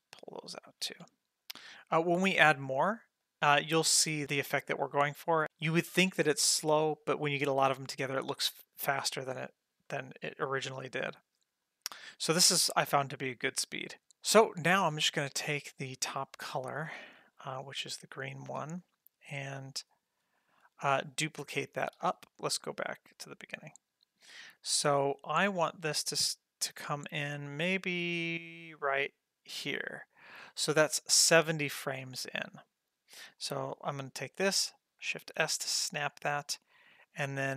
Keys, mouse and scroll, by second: 1.0 ctrl+middle click, 1.8 g, 2.8 ctrl+middle click, 4.0 click, 5.5 ctrl+middle click, 9.9 middle click, 11.6 click, 13.9 click, 14.1 ctrl+middle click, 14.8 middle click, 16.3 click, 17.4 ctrl+middle click, 18.7-19.8 drag, 20.2 click, 20.7 click, 22.0 shift+d, 23.5 click, 25.0-29.3 drag, 30.5 middle click, 30.9 ctrl+middle click, 32.7 middle click, 33.4 click, 35.2 shift+s, 37.0-37.5 drag.